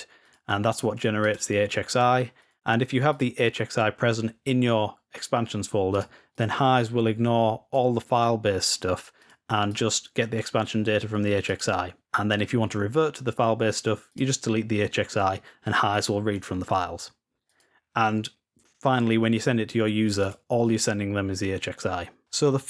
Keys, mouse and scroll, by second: 0.1-1.0 drag, 1.1-1.9 drag, 2.3 click, 3.0-3.6 drag, 5.7-8.1 drag, 8.9-12.0 drag, 13.8-14.7 drag, 17.2 click, 19.9-20.9 drag, 22.1 click.